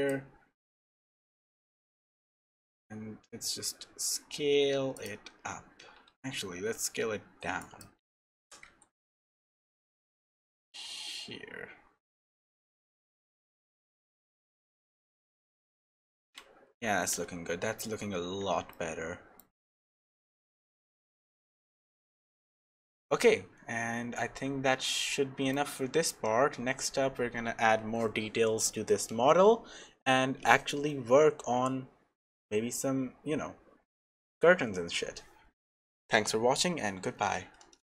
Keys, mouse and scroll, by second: 8.4 g, 15.9-16.9 scroll up 1, 16.9 scroll up 3, 17.4-18.4 scroll down 1, 18.4-18.7 scroll down 1, 18.7 shift+middle click, 20.9 shift+middle click, 21.3-21.8 scroll down 2, 21.8 shift+middle click, 25.6 shift+middle click.